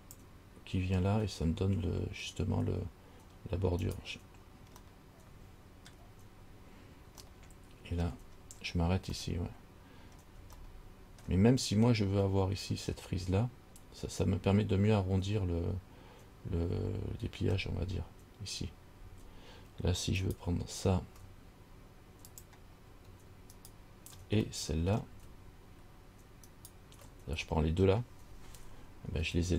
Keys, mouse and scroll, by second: 5.1 middle click, 6.1 scroll down 1, 7.5 shift+middle click, 7.5 shift+scroll up 1, 8.2-9.3 shift+scroll down 2, 9.3 scroll down 1, 9.4 middle click, 10.3 scroll down 1, 10.8 shift+middle click, 12.2-12.8 scroll up 3, 20.4 alt+right click, 22.5 click, 23.8 alt+right click, 24.8 middle click, 26.7 alt+shift+right click.